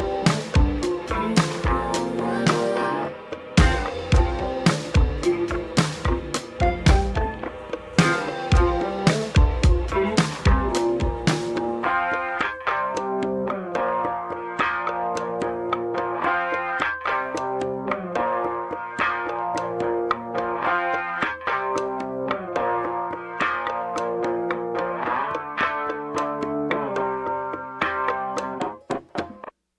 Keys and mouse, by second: 2.1 ctrl+b, 3.1 s, 4.8 click, 5.5 click, 6.6 click, 7.8 middle click, 8.2 ctrl+middle click, 8.9 click, 10.3 middle click, 11.1 ctrl+shift+z, 11.6 shift+d, 12.5-14.0 drag, 14.0 r, 15.4 shift+d, 16.7 click, 17.1 r, 18.9 r, 21.5 ctrl+j, 22.4-23.4 drag, 26.4 ctrl+z, 27.2-28.7 drag, 28.3 Tab, 28.3 1, 28.3 shift+z, 29.2 g.